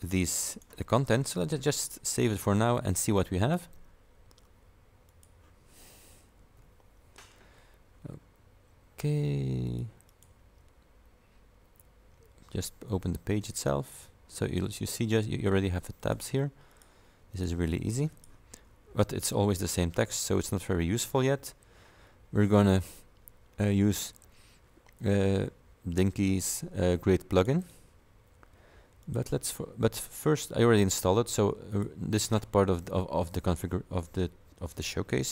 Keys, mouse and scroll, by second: 1.5 click, 2.4 click, 5.1 click, 6.6 F5, 9.7 click, 10.2 click, 14.1 scroll down 2, 15.2 click, 16.1 click, 16.8 click, 17.4 click, 18.2 click, 20.6 click, 22.6 click, 27.4 click, 29.1 click, 31.8 click.